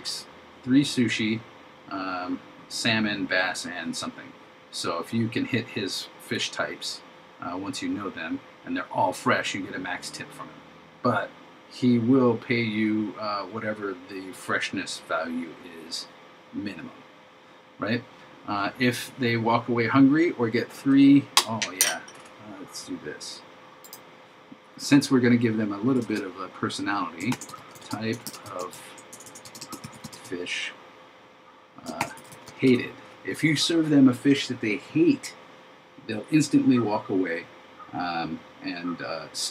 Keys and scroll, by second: 27.4 shift+t, 29.8 shift+f, 32.0 shift+h.